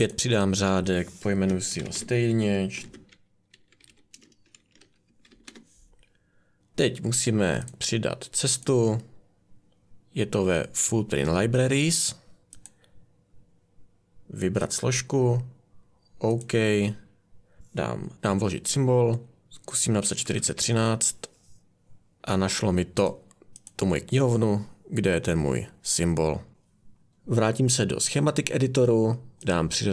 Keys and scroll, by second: 1.4-5.7 typing, 18.1 a, 19.9-21.0 typing.